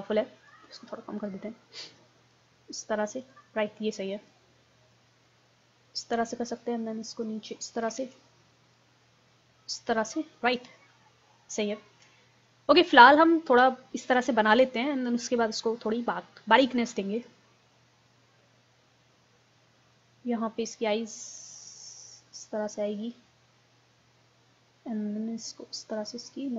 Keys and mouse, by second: 8.0 ctrl+z, 10.5-15.4 middle drag, 15.5-16.5 middle drag, 16.5-18.4 drag, 18.5-20.3 middle drag, 21.2-23.2 drag.